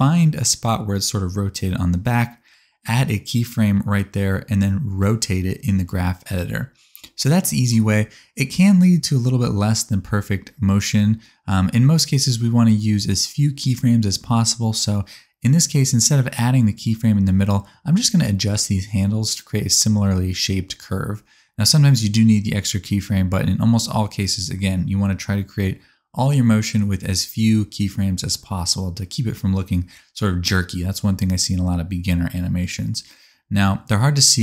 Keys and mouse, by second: 1.0-4.4 drag, 4.4 middle click, 4.7-6.6 drag, 7.3 r, 9.2 space, 11.0 alt+a, 17.6 space, 17.9 middle click, 18.2 x, 19.8 middle click, 20.4 r, 22.6 middle click, 23.3 r, 25.5 click, 25.7 s, 27.5 click, 28.6 click, 28.9-32.2 drag, 28.9 s, 32.5 space.